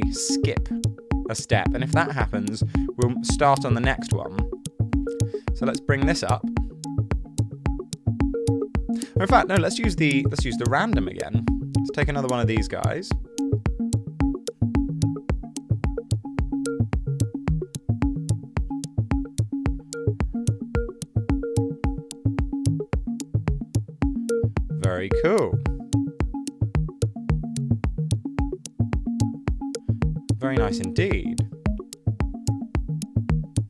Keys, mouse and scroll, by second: 9.2 super+z.